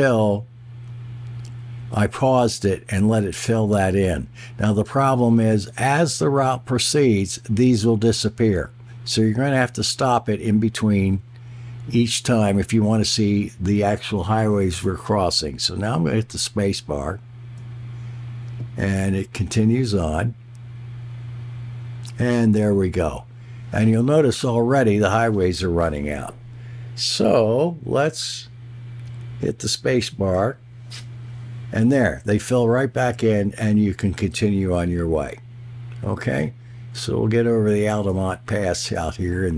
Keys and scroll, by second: 17.5 space, 30.1 space, 37.8 space.